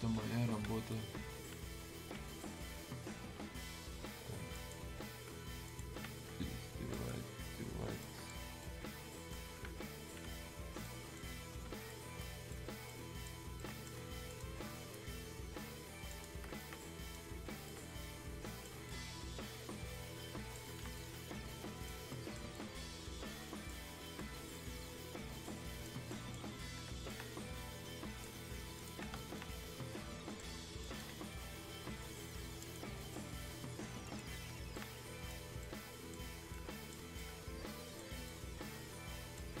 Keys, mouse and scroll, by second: 4.5 click, 6.9 click, 8.0-10.8 alt+right drag, 10.8-13.6 alt+right drag, 14.3 click, 16.1 click, 16.6 right click, 17.6-20.9 alt+right drag, 20.9-22.4 alt+right drag, 22.5-24.2 alt+right drag, 24.2-26.8 right drag, 26.8-28.7 alt+right drag, 28.7 click, 29.3-30.8 alt+right drag, 30.8 right click, 32.6 click, 34.7 alt+right click, 35.6 right click, 36.5-39.6 right drag.